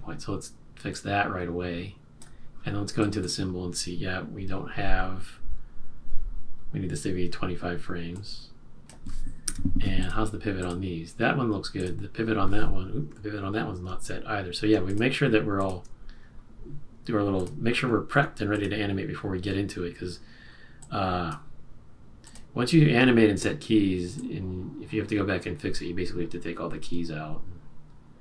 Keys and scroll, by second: 9.4 F5.